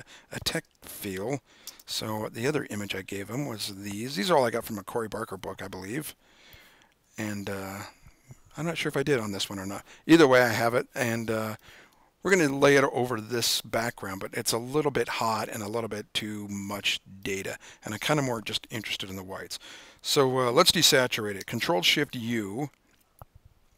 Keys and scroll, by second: 2.0 super+o, 22.3 shift+super+u.